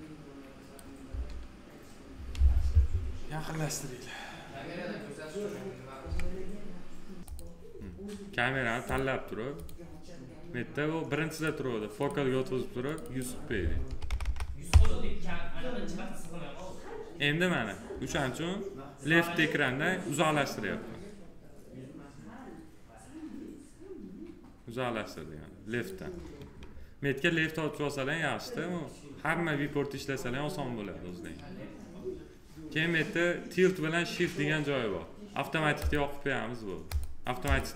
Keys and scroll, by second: 0.8 s, 13.7 1, 14.5 Return.